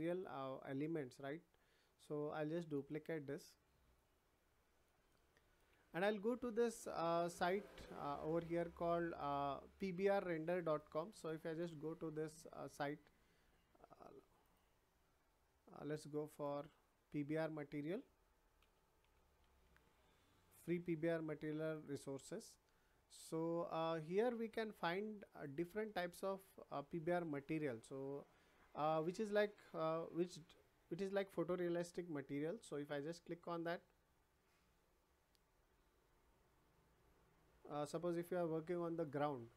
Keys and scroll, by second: 18.6 p, 19.0 b, 19.4 r.